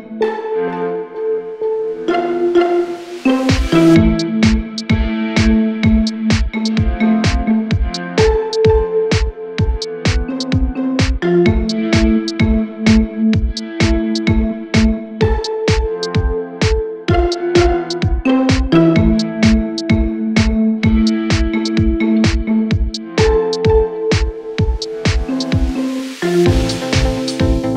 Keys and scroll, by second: 9.0 ctrl+q, 10.0 Delete, 24.4 Delete.